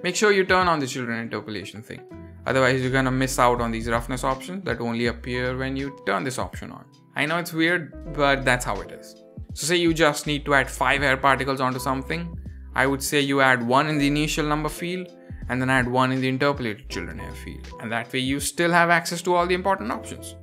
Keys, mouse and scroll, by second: 0.0-0.4 scroll down 3, 0.7 scroll down 1, 3.2 click, 3.7-4.2 scroll down 1, 4.2 click, 4.5-5.2 scroll down 2, 5.2 click, 5.5-6.0 scroll down 2, 6.4 click, 6.8 click, 9.4 middle drag, 9.4 click, 9.4 scroll down 2, 9.8 scroll up 2, 10.6 click, 11.2 click, 12.9-15.0 scroll down 20, 15.0-16.2 drag, 15.0-16.0 scroll down 1, 16.4 click, 17.2-17.6 scroll up 3, 17.7 shift+middle drag, 18.0 scroll up 3, 18.3-18.9 middle drag, 19.0-19.5 middle drag.